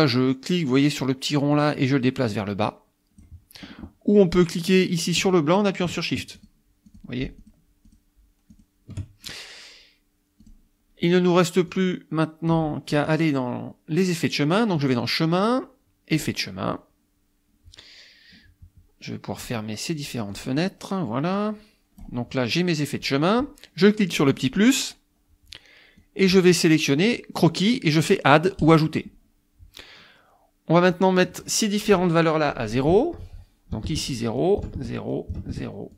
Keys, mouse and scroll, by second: 1.5-3.4 drag, 6.4 shift+click, 6.9 shift+click, 7.5 shift+click, 7.9 shift+click, 8.5 shift+click, 10.5 click, 11.7 click, 14.8 click, 16.1 click, 19.4 click, 20.3 click, 21.3 click, 24.3 click, 26.0 click, 28.6 click, 30.9 click, 33.7 KP_0, 33.9 KP_Enter, 34.4 click, 34.7 KP_Enter, 35.1 click, 35.3 KP_0, 35.5 KP_Enter.